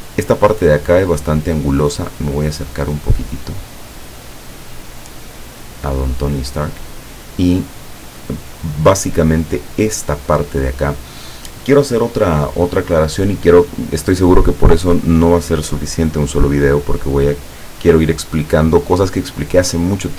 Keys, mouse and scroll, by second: 2.2-3.2 scroll up 2, 3.3-3.6 scroll up 2, 4.3 click, 4.9 scroll up 2, 5.5 scroll up 2, 6.1 click, 9.9 click.